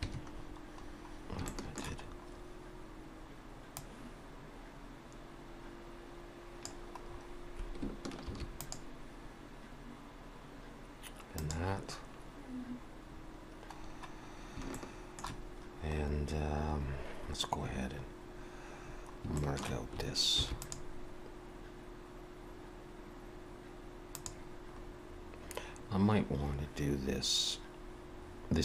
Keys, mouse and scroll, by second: 0.3-1.1 scroll down 6, 1.5 shift+middle click, 2.1 scroll up 1, 3.8 click, 7.1-7.8 scroll up 1, 7.8-8.2 scroll up 2, 8.2 ctrl+r, 12.6-13.0 scroll up 1, 13.0-14.1 scroll down 4, 14.7 shift+middle click, 16.0 scroll up 2, 16.7 scroll up 1, 18.3-18.8 scroll up 1, 18.8-19.4 scroll down 3, 19.4 shift+middle click, 20.4 ctrl+r, 24.7-26.1 scroll up 3.